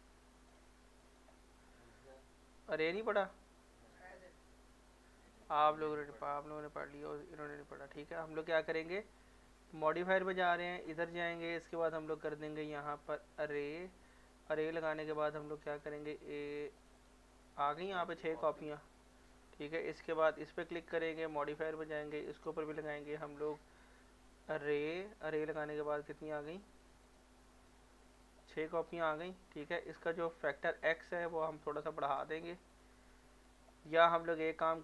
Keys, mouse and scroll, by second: 0.5 click, 3.3 click, 4.3 middle click, 5.3 click, 5.7 scroll up 1, 6.2 middle click, 7.0 click, 7.5 shift+click, 7.9 scroll down 1, 9.9 click, 13.6 click, 14.7 middle click, 16.4 click, 19.1 middle click, 19.9 click, 24.4 click, 26.8 click, 28.8 middle click, 30.8 click, 33.9 middle click.